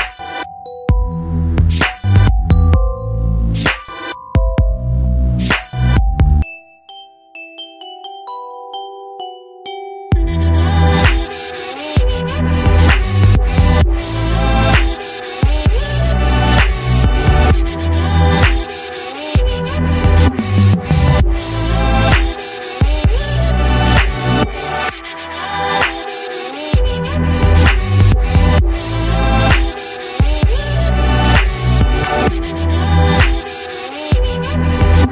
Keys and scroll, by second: 31.8 shift+m.